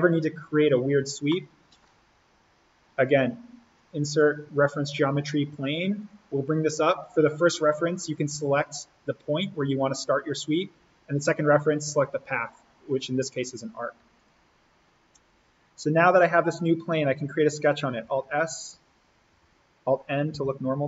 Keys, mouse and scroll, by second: 1.3 middle click, 1.4 scroll, 3.7 click, 14.2 click, 15.9 scroll down 1, 18.0 alt+s, 19.3 alt+n.